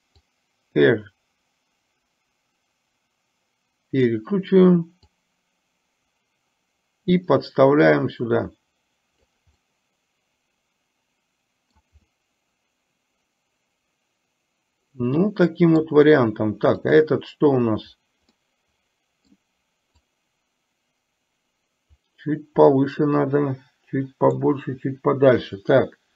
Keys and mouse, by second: 0.5-4.3 drag, 5.3-9.5 drag, 9.6-11.9 middle drag, 12.1-15.8 middle drag, 16.9 click, 18.5-19.5 middle drag, 20.0 click, 20.8-22.1 drag, 22.9-24.4 middle drag.